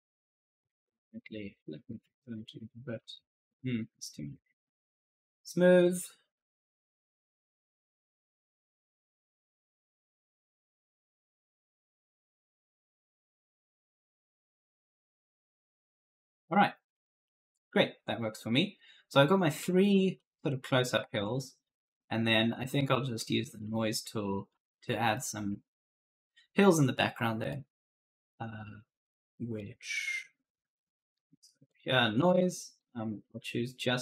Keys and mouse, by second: 1.2-3.9 typing, 1.2 right click, 3.6 right click, 5.1 click, 8.6-10.1 typing, 8.9 right click, 10.1 click, 11.9-16.1 typing, 12.0 right click, 18.3 right click, 19.4 right click, 20.3-21.1 typing, 22.9 w, 23.5 w, 23.8 e, 24.9-27.4 typing, 25.0 right click, 26.9 right click, 29.4 click, 31.5 click, 32.6 click, 33.7 click.